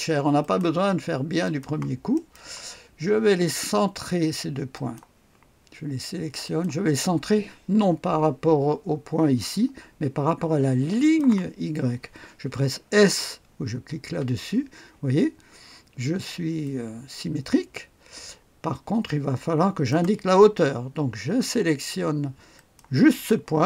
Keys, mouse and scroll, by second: 0.4 click, 1.4 click, 2.1 right click, 2.3 click, 4.7 click, 6.4 click, 11.0 click, 14.0 s, 16.6-20.3 drag, 22.5 click.